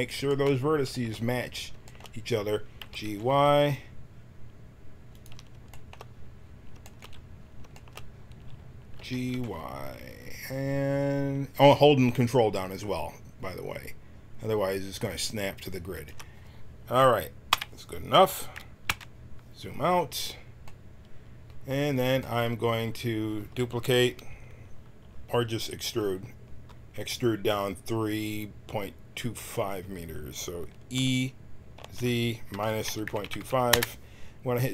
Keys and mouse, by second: 2.8 g, 8.9 g, 17.5 KP_1, 18.8 KP_Decimal, 30.9 e.